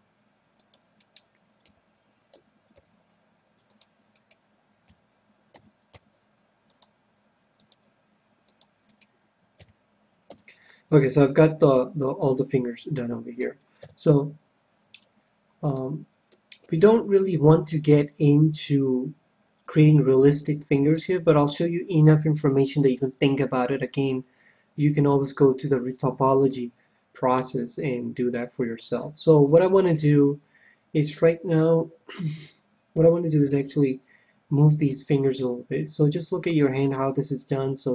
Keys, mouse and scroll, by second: 0.9-2.8 right drag, 1.6 f, 2.3 a, 2.7 c, 4.1-6.0 right drag, 5.2 f, 5.5 a, 5.9 c, 8.9-10.6 right drag, 9.6 f, 10.3 a, 10.8-13.7 middle drag, 13.7 KP_7, 15.1-19.7 middle drag, 20.9-22.4 middle drag, 22.0 KP_7, 25.6-26.1 scroll down 1, 26.1 scroll down 1, 26.4-28.1 middle drag, 28.9-29.4 scroll up 1, 29.4-32.5 middle drag, 32.5 middle click, 33.3 KP_7, 34.8 c, 36.9-37.9 right drag, 37.5-37.9 drag.